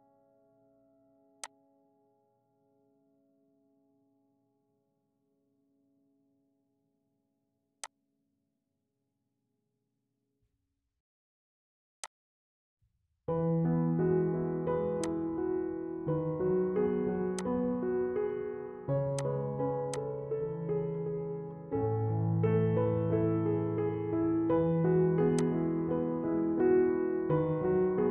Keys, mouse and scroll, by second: 1.5 click, 4.1 F4, 6.4 ctrl+v, 8.0-10.2 drag, 10.2 right click, 10.2 typing, 12.0 click, 14.2-15.1 typing, 15.1 click, 17.4-24.1 drag, 24.1 scroll up 1, 25.3-28.1 drag.